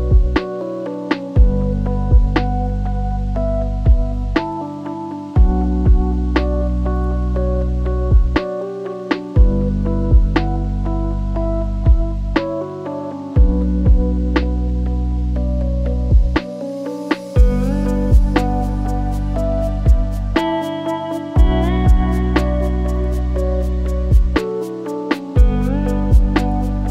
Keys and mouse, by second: 1.4 g, 3.2 shift+middle drag, 4.1 click, 6.0 click, 7.5 click, 9.2-11.6 drag, 15.4-18.2 drag, 18.3 shift+click, 18.5-21.1 shift+drag, 23.7 click, 23.9-26.2 drag.